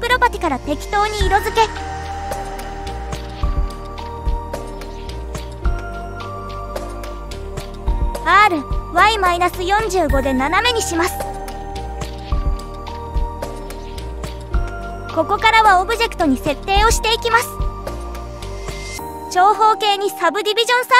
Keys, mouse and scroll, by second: 0.8 click, 1.4 click, 2.2 click, 2.7 click, 4.3 click, 5.1-6.6 drag, 6.7 click, 7.7 middle click, 9.7 r, 12.8-14.4 middle drag, 14.6 click, 17.0 click.